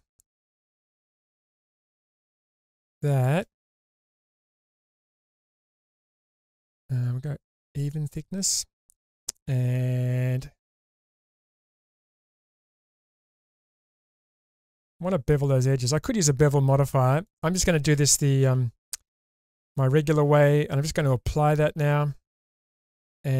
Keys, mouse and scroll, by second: 0.4-3.2 shift+drag, 3.7 Tab, 4.4-6.9 middle drag, 7.8 click, 12.7-15.4 middle drag, 17.2 click, 18.4 Tab, 21.0-21.8 drag, 22.4 Tab, 23.0 middle click.